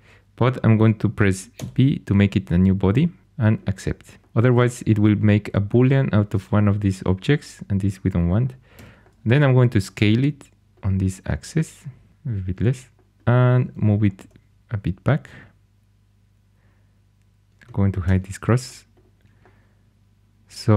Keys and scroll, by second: 1.5 b, 8.7 s, 14.1 g, 18.0 h.